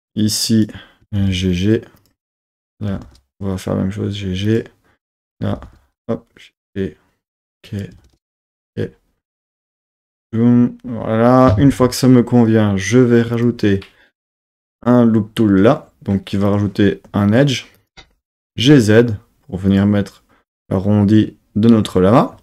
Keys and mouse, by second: 0.5 click, 1.0 g, 1.2 g, 2.0 click, 2.5 click, 2.9 g, 3.0 g, 4.5 click, 5.0 click, 5.5 g, 5.7 g, 6.6 click, 7.7 click, 7.9 g, 8.1 g, 8.5-10.0 drag, 13.4 click, 14.8 click, 16.5 click, 17.8 click, 18.4 g, 18.6 z, 19.7 click.